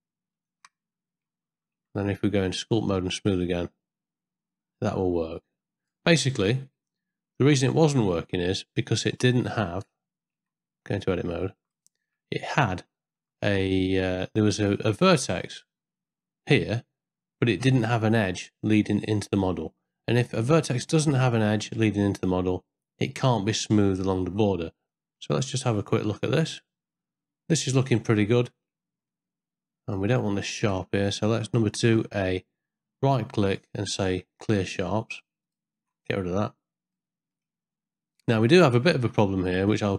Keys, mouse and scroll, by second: 0.6 shift+middle click, 1.8 Tab, 2.5 ctrl+middle click, 3.1 click, 3.4-5.9 drag, 6.7 ctrl+middle click, 9.7 Tab, 10.3 Tab, 11.0 ctrl+middle click, 11.8 shift+middle click, 12.5 ctrl+middle click, 14.4 middle click, 24.9 middle click, 25.4 shift+middle click, 26.1-28.1 middle drag, 28.4 shift+middle click, 29.1 ctrl+middle click, 30.2 ctrl+middle click, 31.4 2, 31.8 a, 33.6-35.5 right drag, 37.0 middle click, 38.4 ctrl+middle click, 39.2 shift+middle click, 39.7 middle click.